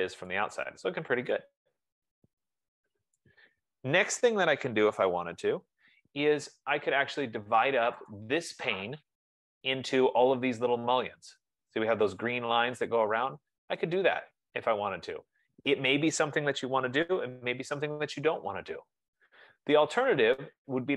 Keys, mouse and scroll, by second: 0.3 right click, 1.1 scroll, 3.4 right click, 6.8-7.2 scroll, 7.3-8.2 scroll, 8.3 click, 12.2-13.2 drag.